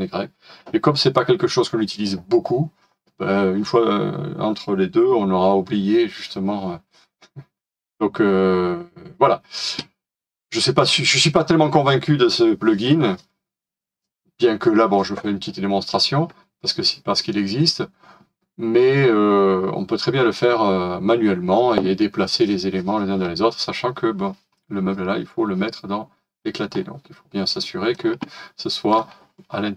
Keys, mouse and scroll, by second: 26.3-26.6 scroll down 1, 26.7-27.3 scroll up 1.